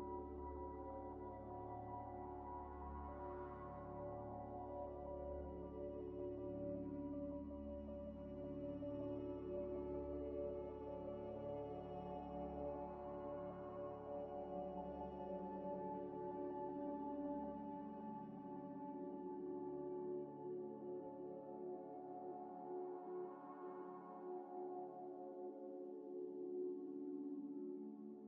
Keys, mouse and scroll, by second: 0.0-0.9 typing, 1.0 scroll up 1, 1.5 middle click, 1.9 scroll down 1, 2.7 s, 3.4 z, 3.9 s, 5.8 s, 5.8 scroll up 1, 6.4 shift+click, 7.4 double click, 7.9-9.2 typing, 9.5 click, 9.5 double click, 10.6 ctrl+ئ, 10.6 ctrl+z, 10.8 ctrl+z, 11.6 middle click, 11.7 g, 11.8 x, 12.4 scroll down 1, 12.8 middle click, 13.6 scroll up 1, 14.8 scroll up 1, 14.9 ء, 16.3 shift+click, 17.2 ctrl+-, 17.7 ئ, 18.1 ئ, 18.6 scroll down 1, 19.0 scroll up 1, 19.0 middle click, 19.5-20.4 typing, 20.5 ctrl+z, 21.4 ctrl+ئ, 21.7 ctrl+ئ, 21.8 ctrl+ئ, 21.9 ctrl+ئ, 22.0 ctrl+ئ, 22.1 ctrl+ئ, 23.0-24.6 typing, 25.0 shift+click, 25.8 ctrl+-, 28.1 scroll up 1.